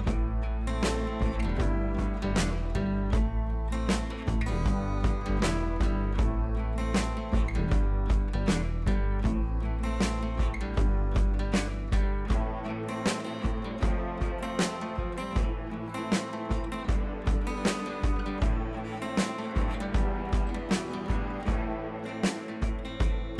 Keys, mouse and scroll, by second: 1.3-2.1 shift+drag, 9.2 click, 11.0 right click, 11.3-12.5 drag, 16.2-16.6 shift+drag, 19.8 right click, 19.8 right click, 20.6-21.4 ctrl+click.